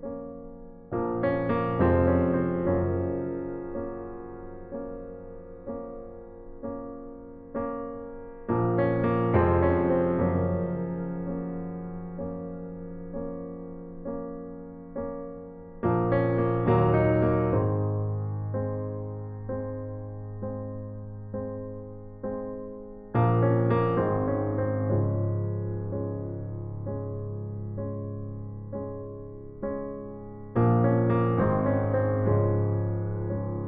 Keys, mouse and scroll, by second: 1.2 f, 2.2 a, 2.7 a, 3.9 shift+d, 4.8 s, 9.4 a, 9.7 c, 12.3-14.8 drag, 13.4 s, 18.2-20.2 drag, 23.8-26.9 middle drag, 25.3 KP_1, 26.9-28.8 drag, 27.8 KP_5, 29.1 middle click, 30.6 a, 32.9 c.